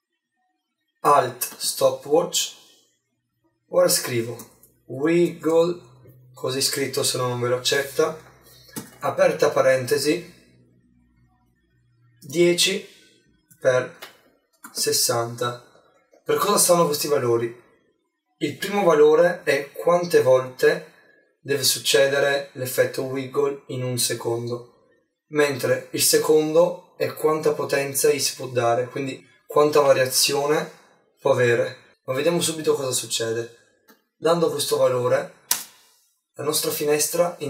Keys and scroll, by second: 8.8 shift+9, 16.4 shift+0.